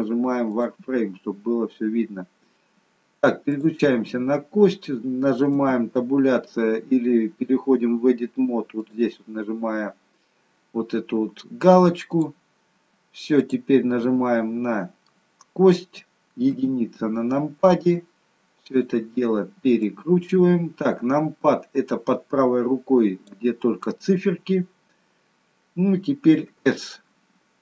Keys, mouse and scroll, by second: 1.3-2.6 scroll up 1, 2.6-3.5 scroll up 1, 3.5 click, 5.5 Tab, 8.7 click, 13.3 click, 13.9 middle click, 16.4 KP_1, 18.6 click, 19.8 click, 26.4 s.